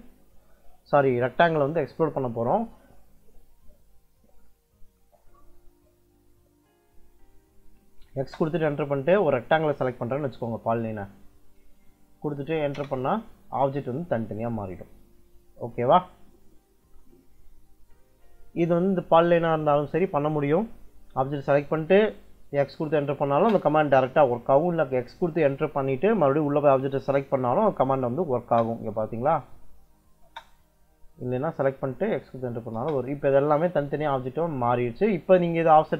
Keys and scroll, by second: 7.0 x, 8.1 space, 12.6 Return, 17.9 Escape, 22.5 x, 23.2 space, 28.3 space, 30.1 space, 32.3 x, 32.7 space, 35.6 Escape.